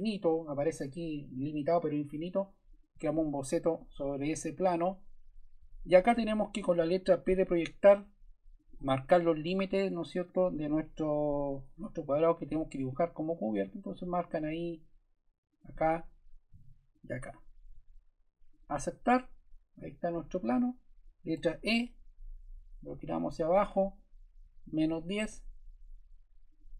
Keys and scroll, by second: 7.2 shift+p, 21.3 shift+e, 24.1-25.3 typing.